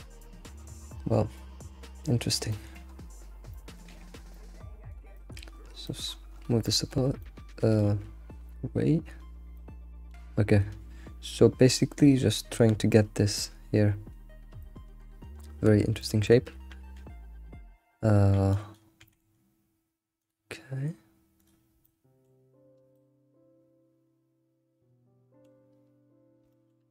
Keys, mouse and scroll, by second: 2.5-2.8 shift+middle drag, 2.8-3.5 scroll up 9, 3.5 shift+middle click, 3.9 g, 5.2 shift+middle click, 5.5 scroll up 1, 5.9 shift+middle drag, 6.1-6.7 scroll up 7, 6.7-9.4 shift+middle drag, 9.4 scroll down 3, 9.6-12.6 shift+middle drag, 14.6-15.4 shift+middle drag, 15.4 scroll up 1, 16.0-16.9 shift+middle drag, 16.9 Tab, 18.5 click, 19.0 g, 21.4 click, 21.8-26.0 shift+middle drag, 26.5 shift+middle click.